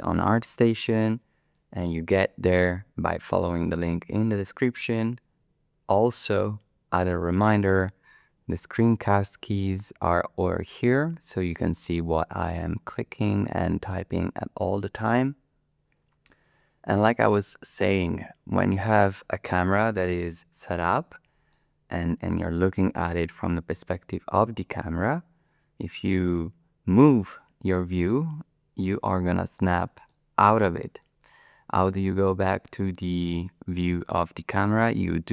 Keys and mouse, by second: 21.5-29.6 middle drag, 30.1-31.9 middle drag, 33.2-34.6 middle drag.